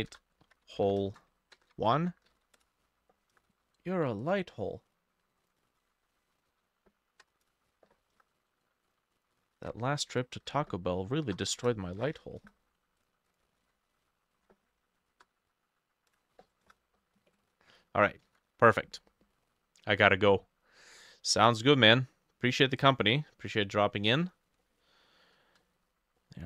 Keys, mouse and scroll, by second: 0.0-1.7 typing, 0.0 shift+middle click, 1.1 shift+middle click, 1.9 ctrl+middle click, 2.0 ctrl+a, 2.3 ctrl+c, 2.6 ctrl+c, 3.4 Return, 5.7-7.0 ctrl+alt+middle drag, 5.8 ctrl+alt+e, 6.5 ctrl+v, 7.3 BackSpace, 7.4 2, 7.5 Return, 8.2 Return, 9.2 double click, 9.6 ctrl+alt+e, 10.4 ctrl+v, 11.3 BackSpace, 11.5 3, 11.6 Return, 12.4 Return, 13.3 double click, 13.6 ctrl+alt+f, 14.4 ctrl+v, 15.1 BackSpace, 16.1 Return, 16.7 Return, 18.3 ctrl+s, 24.7 middle click, 25.7 middle click, 25.9-26.2 scroll up 1, 26.2 middle click.